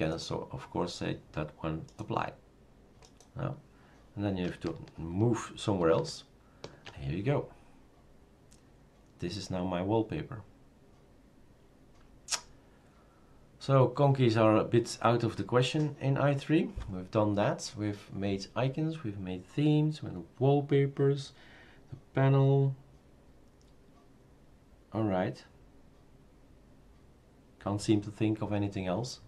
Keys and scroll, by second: 5.8 super+§.